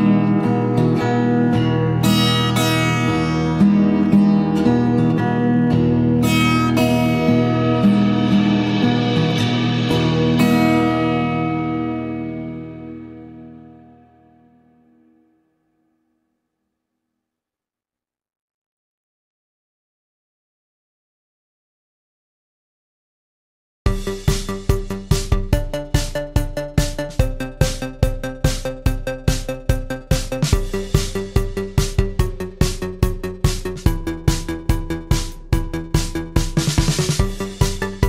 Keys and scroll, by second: 3.1 Escape, 6.6 ctrl+a, 13.9 ctrl+a, 33.8 Escape, 34.1 Escape, 36.2 Escape, 37.3 ctrl+a.